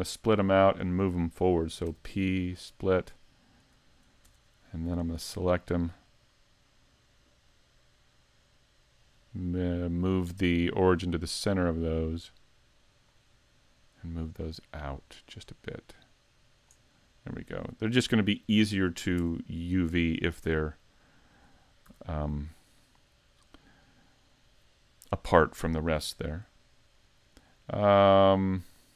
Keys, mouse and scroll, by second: 0.1 middle click, 1.9 p, 4.2 Tab, 5.0 right click, 9.9 click, 11.0 click, 17.0 click, 17.0 middle click, 18.1 scroll down 2, 18.6 shift+middle click, 19.2 Tab, 20.6 Tab, 21.4 scroll down 1, 21.9 a, 22.4 middle click, 25.6 KP_5, 26.1-26.6 scroll down 2, 26.6 shift+middle click, 27.3-28.8 scroll up 1.